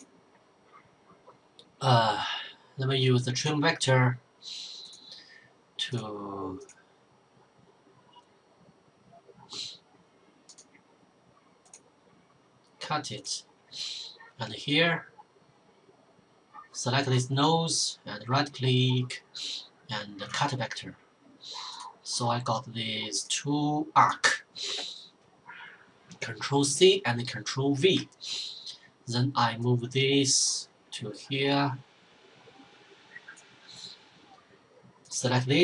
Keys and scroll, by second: 25.9 ctrl+c, 27.0 ctrl+v, 35.2 ctrl+c.